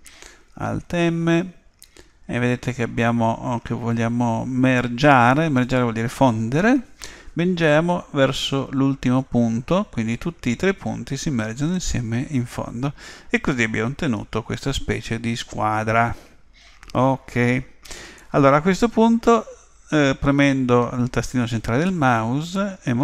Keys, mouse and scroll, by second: 0.8 alt+m, 18.2-23.0 middle drag.